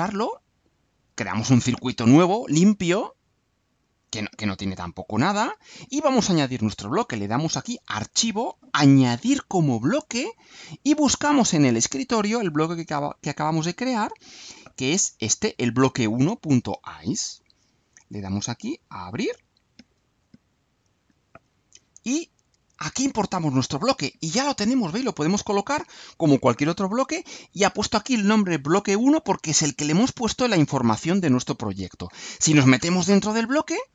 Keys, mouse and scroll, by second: 1.4-5.4 drag, 9.7-11.7 drag, 15.7 click, 17.4 alt+click, 19.3 click, 20.2 click, 22.9 click, 24.5-25.7 drag, 29.8-30.8 drag, 33.4 click.